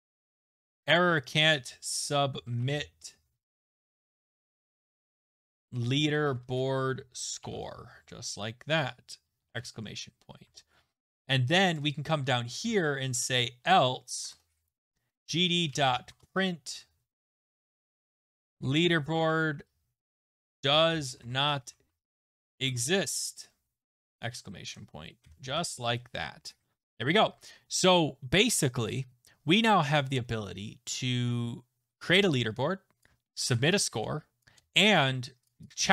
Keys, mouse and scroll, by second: 0.0-3.1 typing, 1.6 click, 4.3-8.4 typing, 8.8 Left, 9.7 Right, 9.9 Right, 10.2-10.9 typing, 11.0 Down, 11.5 Down, 11.7 Return, 12.3-24.5 typing, 14.3 Return, 24.6 Right, 25.2 Right, 25.5 ctrl+s, 26.2 click, 26.3 click, 31.0 scroll, 33.0 click, 34.4 click, 35.5 click.